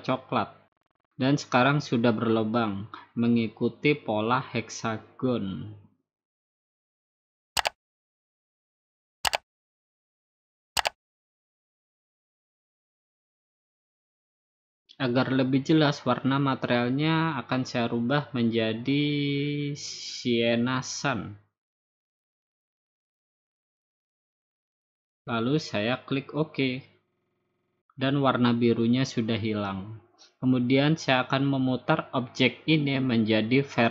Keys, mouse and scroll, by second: 1.2-2.3 drag, 4.3-5.4 drag, 6.1-7.3 drag, 8.1 click, 9.9 click, 11.8 click, 12.3 scroll down 2, 12.4 middle click, 12.8 middle click, 12.9 middle click, 15.5 Escape, 17.9 click, 20.4 click, 21.3 middle click, 22.5-23.5 drag, 24.3-25.4 drag, 26.0-27.1 drag, 27.4-28.5 drag, 29.8 scroll down 2, 32.7 click.